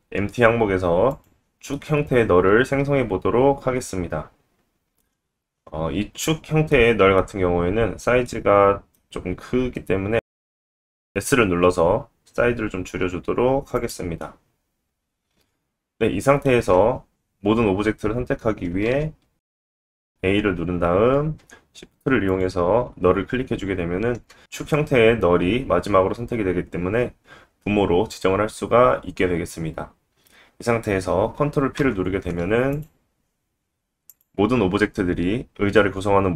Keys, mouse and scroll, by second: 1.7-2.3 middle drag, 5.9-6.4 scroll up 2, 6.7-8.2 middle drag, 10.2 s, 13.3-17.8 middle drag, 16.7-17.1 scroll up 1, 17.2-17.8 scroll down 1, 17.8 click, 17.8 scroll down 1, 17.9-19.1 middle drag, 19.0 click, 19.2 click, 19.6 a, 22.3 shift+click, 31.7 ctrl+p, 34.1 click.